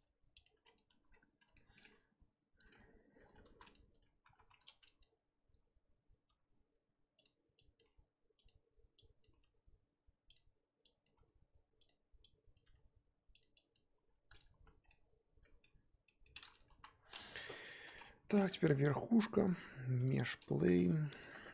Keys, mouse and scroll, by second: 0.6-1.5 scroll down 8, 0.9 Tab, 1.5-1.9 shift+middle drag, 1.9 scroll up 2, 2.8 Tab, 2.8 scroll up 3, 3.4 ctrl+r, 4.4 1, 5.0 click, 6.3 g, 7.8 click, 7.8 g, 9.2 click, 9.3 g, 11.0 click, 11.1 g, 12.5 click, 12.6 g, 13.7 click, 14.0 g, 14.6 z, 14.8 scroll down 1, 14.9-16.7 middle drag, 16.7 KP_1, 17.4 z, 17.6 shift+middle click, 18.0 scroll down 1, 18.0 Tab, 18.5 click, 20.1 shift+a, 20.2-20.8 scroll down 10, 20.8 g.